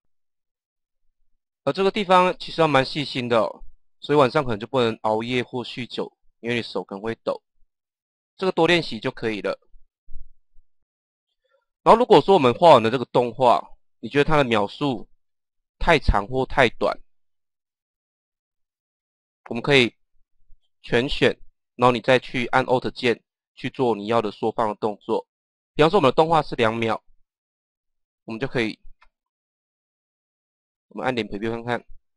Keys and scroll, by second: 15.2 KP_0, 28.9 KP_0, 31.6 KP_0.